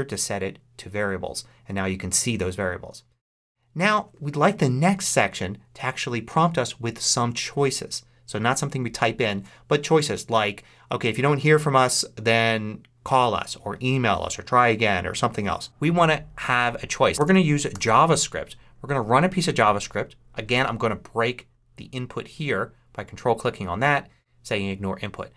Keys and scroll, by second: 16.9-18.1 typing.